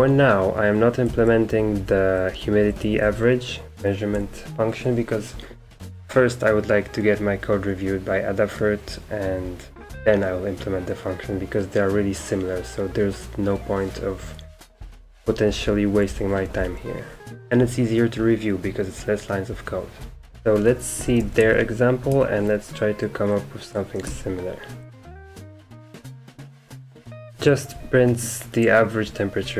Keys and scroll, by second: 1.2-4.1 typing, 5.3-7.4 typing, 15.0-17.1 typing, 20.4-22.6 typing, 24.0-24.8 typing.